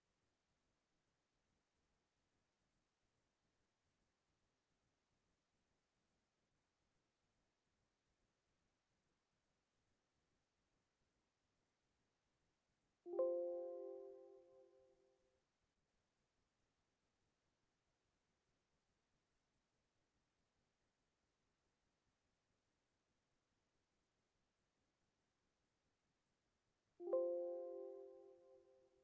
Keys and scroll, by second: 10.9 ctrl+v, 11.6 ctrl+space, 14.2 Up, 18.7 ctrl+Up, 19.1 ctrl+k, 20.9 KP_1, 21.7 i, 21.7 n, 22.0 Return, 22.6 Up, 22.8 Up, 23.0 Up, 23.1 Up, 24.2 space, 25.7 ctrl+space, 27.8 Up.